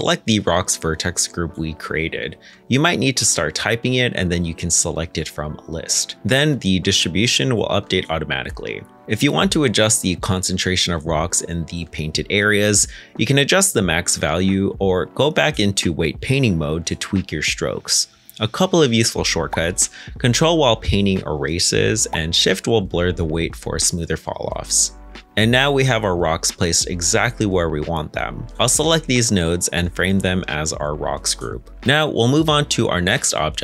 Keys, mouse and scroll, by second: 6.2 middle click, 18.5 ctrl+Tab, 20.6 middle click, 21.3 ctrl+click, 23.6 ctrl+z, 24.2 shift+click, 25.8 middle click, 25.9 ctrl+Tab, 25.9-26.9 scroll down 1, 26.9-28.1 scroll up 1.